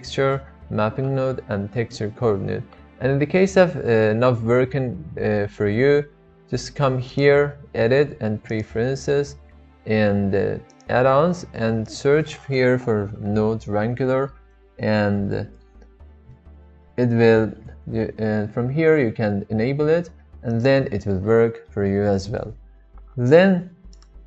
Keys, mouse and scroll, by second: 0.2 click, 7.2-9.4 drag, 23.9 click.